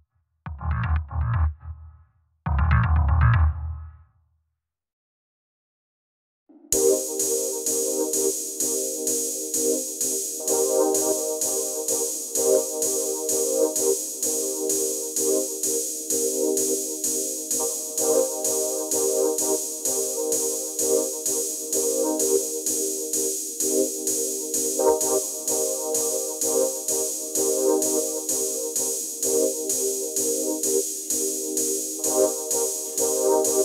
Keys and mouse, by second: 2.2 click, 3.0 click, 3.3 click, 4.3 click, 5.2 click, 10.4 click, 11.1 shift+click, 11.7 click, 12.3 click, 13.1 shift+middle click, 13.5 click, 13.6 shift+middle click, 13.8-15.2 drag, 15.4-15.7 drag, 15.8 click, 18.8 click, 21.7 middle click, 25.5 click, 27.0 click, 31.6 click, 32.0 click.